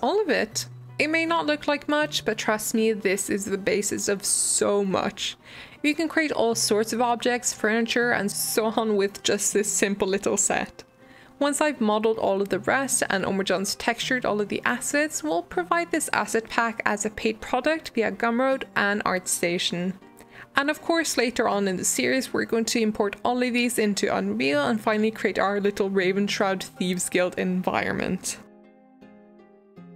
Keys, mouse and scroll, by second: 3.8-14.2 shift+middle drag, 14.2-14.7 scroll down 2, 14.7-15.6 middle drag, 15.6-16.1 scroll down 2, 16.0-18.6 middle drag.